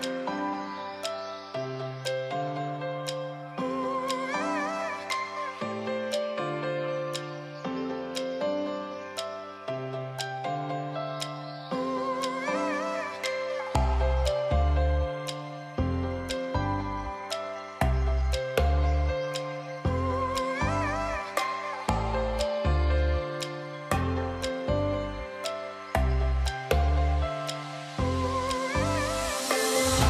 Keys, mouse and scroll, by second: 0.2 ctrl+t, 0.7-7.0 drag, 7.8 Return, 10.7-17.5 drag.